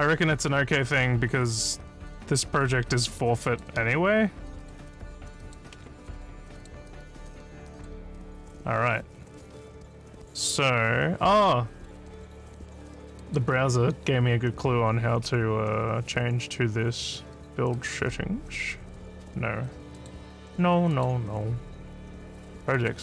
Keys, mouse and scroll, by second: 2.2 click, 3.1 click, 3.5 click, 4.6 click, 5.4 click, 6.6 click, 7.8 click, 13.2 click, 17.7 click, 20.0 click, 20.9 click, 22.7 click.